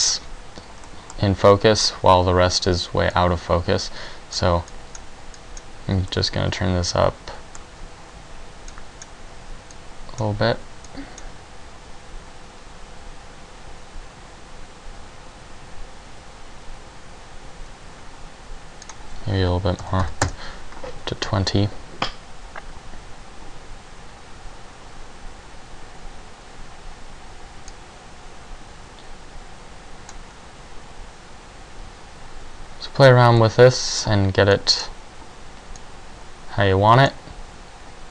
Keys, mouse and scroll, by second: 9.0 click, 10.0 click, 11.1 click, 34.7 middle click, 34.7 click, 36.3 click.